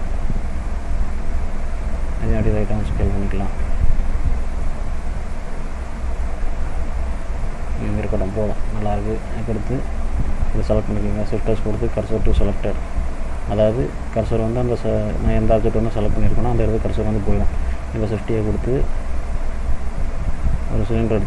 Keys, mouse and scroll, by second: 0.9 shift+click, 2.1 s, 5.4 middle click, 6.7 click, 7.2 middle click, 8.4 middle click, 9.0-9.8 scroll up 1, 10.4 click, 11.3 shift+s, 15.9-17.4 scroll up 1, 17.6 shift+a.